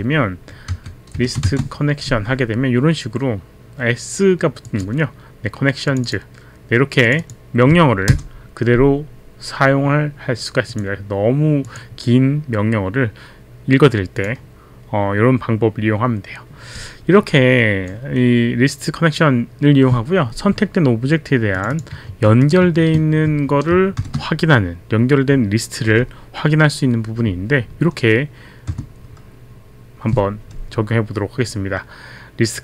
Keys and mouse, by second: 0.0-1.5 typing, 4.7 click, 5.9 click, 6.1 click, 7.1 click, 8.0 Return, 10.7 click, 11.7 click, 14.2 click, 21.5 click, 21.7 click, 22.3 ctrl+c, 22.3 click, 22.4 click, 22.9 ctrl+v, 22.9 ctrl+c, 22.9 click, 23.7 ctrl+shift+v, 24.0 shift+0, 28.7 Return.